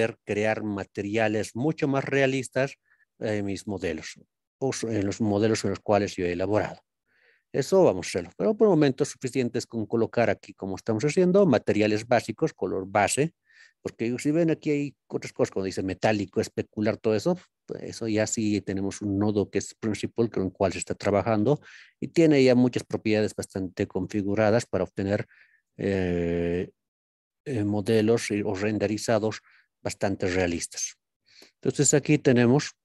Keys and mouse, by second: 0.4 click, 2.0-3.6 drag, 4.8 click, 6.5 click, 7.7 click, 10.1-11.2 drag, 18.0 click, 19.5-21.0 drag, 21.8 click, 23.0 click, 25.6 click, 28.1-29.1 drag, 29.9-31.0 middle drag, 31.6-32.8 middle drag.